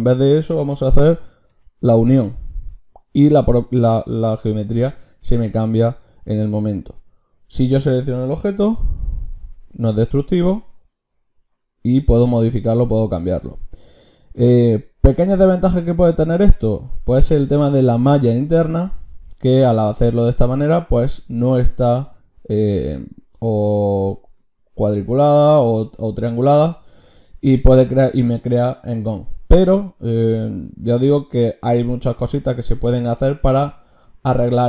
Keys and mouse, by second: 4.0-7.2 drag, 8.7 g, 11.9-20.6 drag.